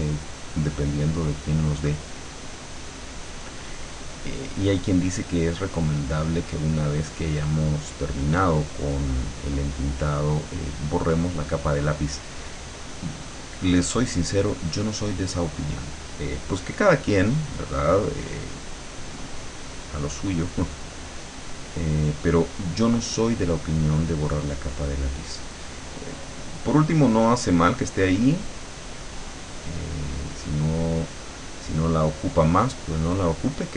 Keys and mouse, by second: 9.7-12.1 drag, 13.0-15.2 drag, 16.7 middle click, 17.9 click, 18.9-29.6 drag, 30.5-31.8 middle drag, 31.8-33.3 drag.